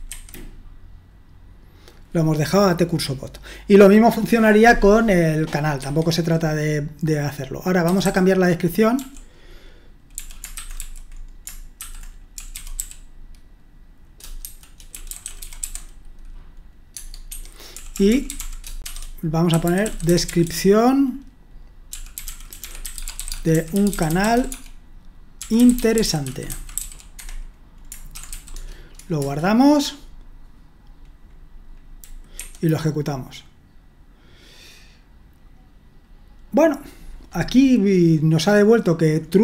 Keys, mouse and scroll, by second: 0.1 F5, 5.8 Escape, 8.0-16.1 typing, 16.9 Tab, 17.3 Escape, 17.5-20.4 typing, 21.9-28.7 typing, 27.1 Escape, 29.2 Return, 32.3 F5.